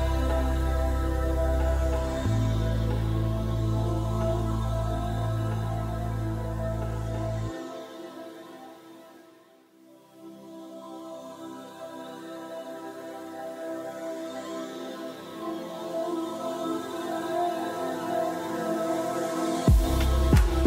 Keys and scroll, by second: 18.6-20.6 typing.